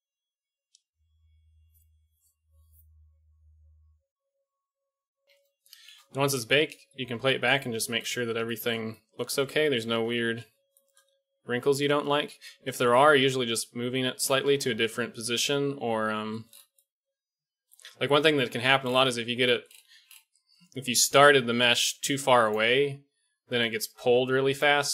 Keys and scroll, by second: 4.9 alt+a, 5.2 alt+a, 5.9 shift+Left, 6.3 alt+a, 14.7 alt+a, 18.2 KP_1, 21.8-24.9 d.